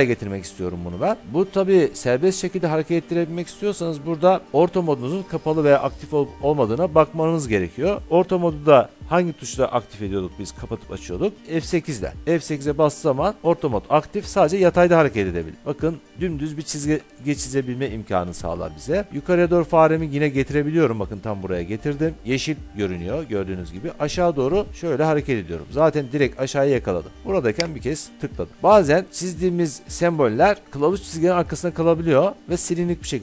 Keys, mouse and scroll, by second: 11.4 F9, 12.1 F8, 27.9 click, 28.5 Escape.